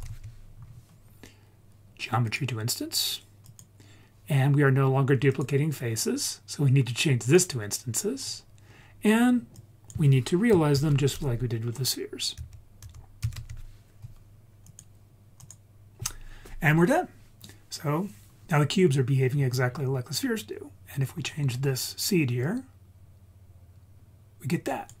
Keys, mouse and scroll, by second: 5.3-7.3 drag, 8.2 scroll down 2, 8.8-9.5 scroll up 3, 9.5 click, 10.7 shift+a, 19.3-20.7 scroll down 4, 20.7-22.4 scroll up 6, 22.4-24.8 drag.